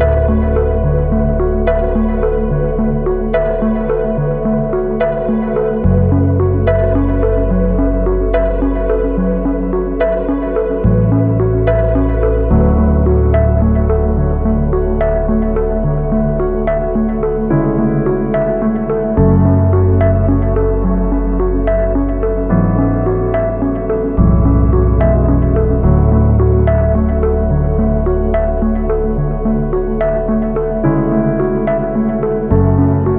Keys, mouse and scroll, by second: 5.4-7.1 drag, 7.3 scroll up 1, 7.6 alt+click, 8.0 scroll up 2, 8.2 alt+click, 8.8 alt+click, 9.3 alt+click, 9.7 alt+click, 10.2 scroll down 2, 10.5-11.7 alt+drag, 11.9 alt+click, 12.3 scroll down 1, 12.5 alt+click, 13.0 scroll up 2, 13.4 alt+middle click, 13.7-14.1 scroll up 2, 14.3 alt+click, 14.7 scroll down 1, 15.9 scroll down 2, 21.4-25.9 drag, 26.4 scroll up 2, 26.6 alt+drag, 27.0 scroll up 2, 27.3 alt+middle click, 27.8 scroll down 2, 28.0 alt+click, 28.3 scroll down 2, 28.6 alt+middle click, 28.8 scroll up 1, 28.9 scroll down 2, 29.2 alt+click, 30.8-33.1 alt+drag.